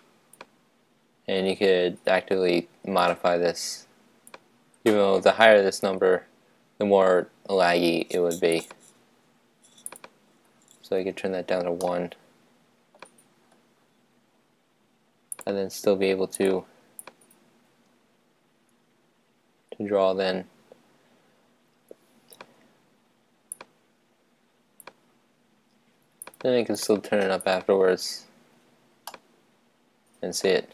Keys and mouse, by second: 3.1-4.9 drag, 8.5-11.6 drag, 11.8-13.5 middle drag, 15.3-18.9 drag, 23.6-25.4 drag, 26.2-29.1 drag, 29.1-30.7 middle drag.